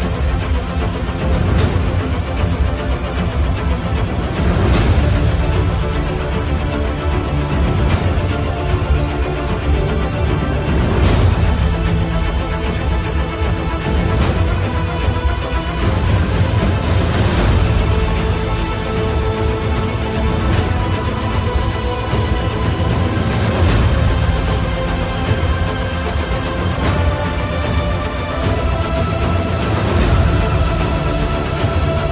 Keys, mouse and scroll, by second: 4.6-6.1 drag, 11.6 ctrl+z, 13.5-25.5 drag, 26.0-31.4 drag.